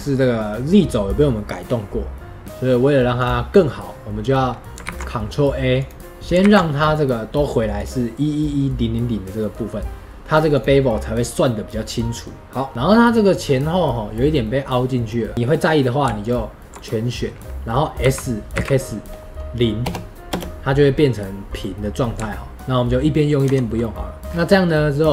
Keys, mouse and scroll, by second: 3.1 click, 5.7 click, 9.3-10.5 middle drag, 10.5 click, 12.7-16.1 middle drag, 16.1 alt+click, 16.7-22.8 middle drag, 23.5 Tab, 23.7-24.2 middle drag, 24.2 click, 24.3-25.0 scroll up 2, 25.0 scroll up 1.